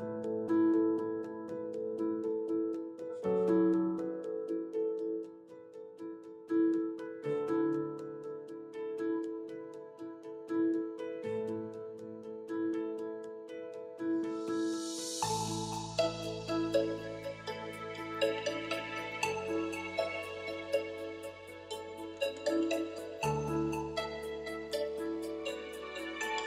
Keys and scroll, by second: 17.2 shift+i, 23.9 shift+2, 25.5 shift+3.